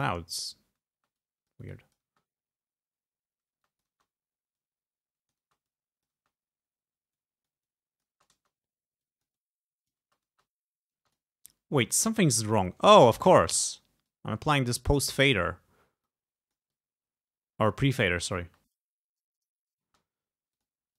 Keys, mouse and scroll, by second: 1.0 space, 1.2 click, 2.1 space, 3.7 space, 3.7 click, 4.6 click, 5.5 space, 5.7 click, 6.2 space, 7.2-8.3 drag, 8.2 space, 9.1-10.2 drag, 10.1 space, 11.1 space, 11.2 click, 14.1-15.7 drag, 16.1-18.1 drag, 18.5 space, 19.3 click, 19.9 space, 20.6 click.